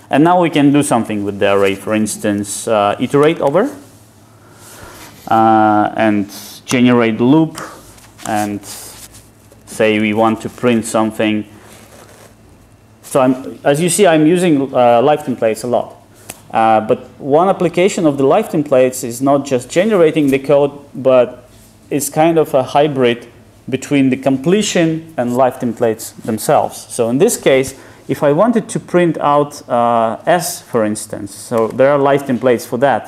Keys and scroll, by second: 6.8 Return.